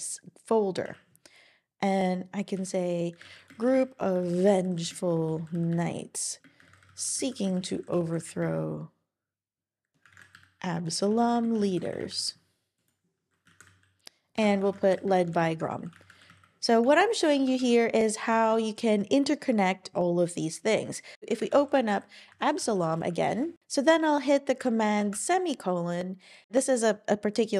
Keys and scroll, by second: 2.9-4.1 typing, 5.5-8.4 typing, 9.9-12.2 typing, 13.2-14.0 typing, 14.4 alt+BackSpace, 14.7 alt+BackSpace, 16.0-18.8 typing, 17.5 super+Right, 21.5 super+o, 21.5-23.4 typing, 25.0 super+;.